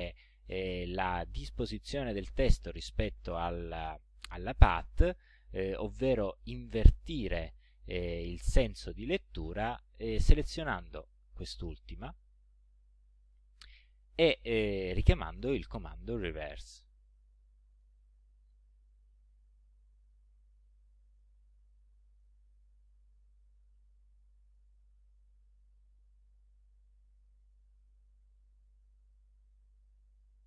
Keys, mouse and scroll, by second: 10.6 click, 11.3 click, 12.0 click, 13.3 click, 16.8 click, 20.0 click, 21.2-22.4 middle drag, 23.2 ctrl+scroll down 2, 24.0 ctrl+click, 27.3-28.8 drag, 29.2-30.4 drag.